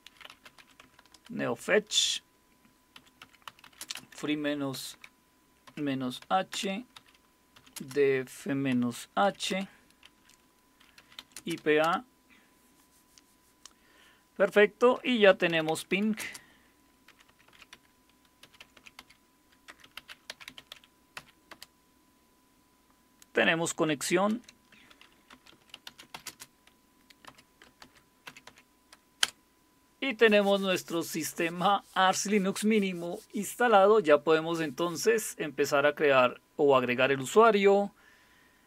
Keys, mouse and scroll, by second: 0.0-1.1 typing, 2.7-9.5 typing, 10.7-12.1 typing, 15.1-21.1 typing, 21.5 Return, 24.1-29.0 typing, 29.2 Return.